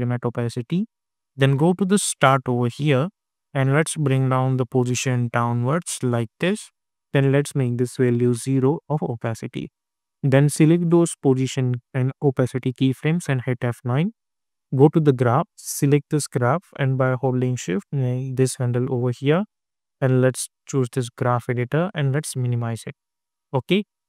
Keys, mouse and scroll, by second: 2.1-7.5 drag, 8.4 Return, 8.9 scroll down 1, 10.5-13.2 drag, 13.2 F9, 14.6-17.3 drag.